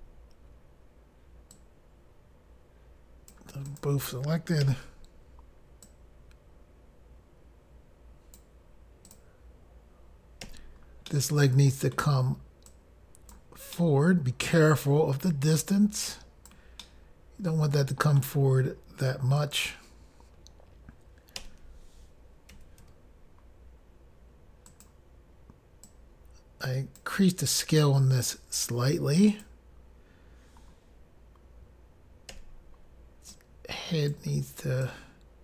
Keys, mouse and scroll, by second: 1.7 click, 3.8 click, 3.9 click, 4.8 i, 6.0 click, 9.2 click, 9.3 click, 10.6 i, 11.2 middle click, 12.8 click, 13.9 middle click, 15.6 click, 16.9 middle click, 19.6 click, 19.7 click, 22.7 i, 22.7 s, 24.8 click, 25.0 click, 26.0 click, 29.5 click, 29.6 click, 33.5 click, 33.5 i, 35.0 click.